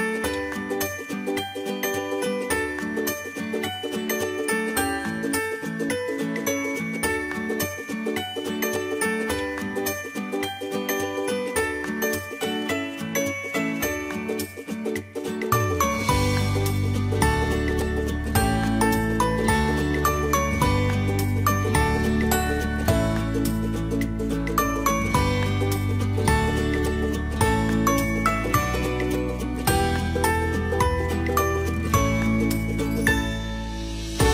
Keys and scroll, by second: 32.0 ctrl+t.